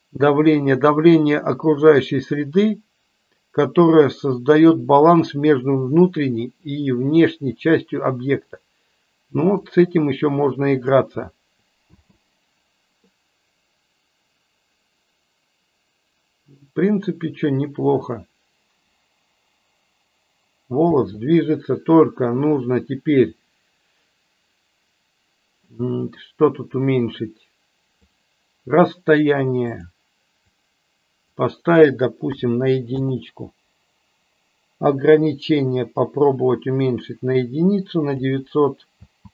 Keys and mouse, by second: 9.6-10.8 drag, 11.8 space, 21.1 space, 27.9-33.5 drag, 35.6-38.1 drag, 38.9 space.